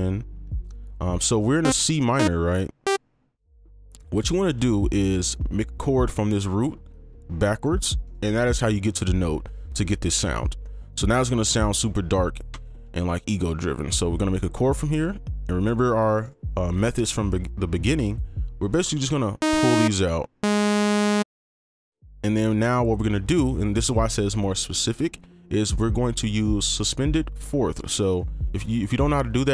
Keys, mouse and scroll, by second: 3.7 right click, 4.7 ctrl+click, 6.7 shift+2, 6.9 shift+click, 7.8 right click, 12.5 ctrl+click, 13.9 shift+click, 16.2 right click, 16.9 ctrl+click, 18.7 right click.